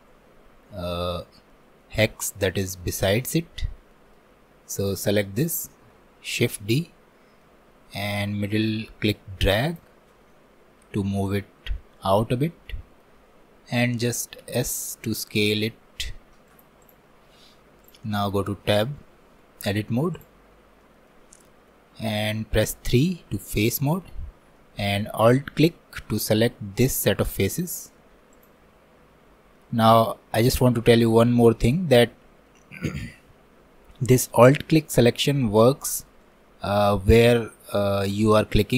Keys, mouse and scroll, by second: 3.7 scroll down 1, 3.9 middle click, 4.3-4.8 scroll up 1, 4.8 click, 5.3-6.4 shift+middle drag, 6.4 shift+d, 10.3-11.7 middle drag, 11.7 scroll up 1, 12.0-14.4 middle drag, 14.4 s, 17.9 click, 18.2 Tab, 18.7-20.2 shift+middle drag, 20.2 click, 20.5 scroll up 1, 20.8-22.9 shift+middle drag, 22.9 3, 23.7 shift+middle click, 24.2 scroll up 2, 24.6-27.6 middle drag, 28.4 alt+click, 29.2 scroll down 1, 29.6-33.5 middle drag, 33.5-34.3 scroll up 2, 34.3-38.7 middle drag.